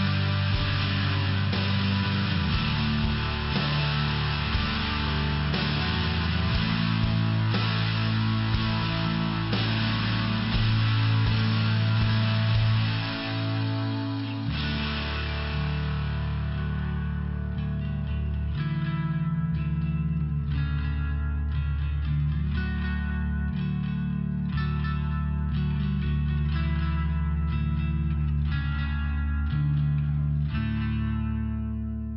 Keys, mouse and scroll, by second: 0.5 click, 6.1 click, 8.0 click, 10.1 click, 11.2 click, 19.0 click, 24.3 click, 25.4 click, 31.3 click.